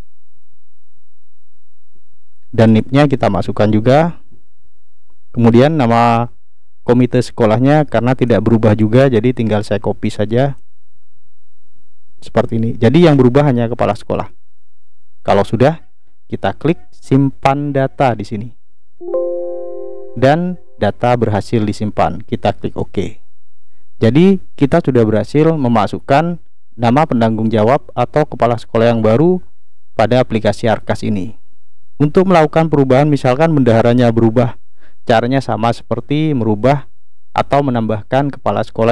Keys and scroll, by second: 1.8 ctrl+v, 2.9-5.0 typing, 9.6 ctrl+c, 12.0 ctrl+v.